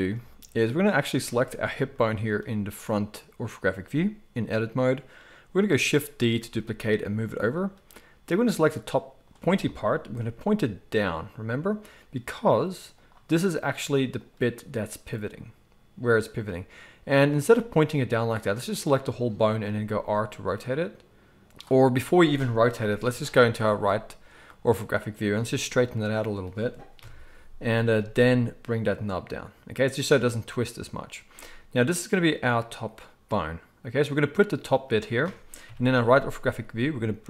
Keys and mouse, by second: 1.1 click, 1.2-8.3 middle drag, 6.3 shift+d, 8.3-14.3 drag, 10.2 g, 14.3-17.1 middle drag, 17.1 click, 17.2-18.7 middle drag, 17.4 g, 18.7 click, 18.8-24.4 middle drag, 19.6 r, 23.0 KP_3, 24.4 click, 24.5-26.1 middle drag, 25.3 g, 26.9 KP_1, 27.9 g, 30.4 click, 31.3 g, 35.6 KP_3, 36.6 g.